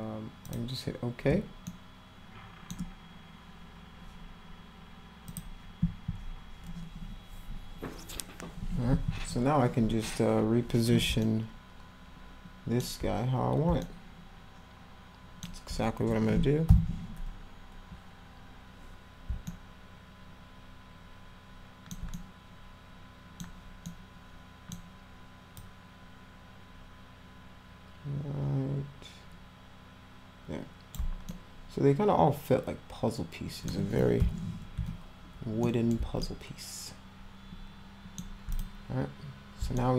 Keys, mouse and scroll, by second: 0.4 click, 1.3 space, 1.6-2.6 middle drag, 5.3 click, 11.2-12.8 alt+middle drag, 13.8-15.4 alt+middle drag, 19.4-21.9 alt+middle drag, 22.1-23.4 middle drag, 23.8 middle click, 25.5-30.9 drag, 31.3-33.6 alt+middle drag, 34.1 p, 34.7 z, 35.6 middle drag, 36.2-38.2 alt+middle drag, 38.5 click, 39.7-39.9 alt+middle drag.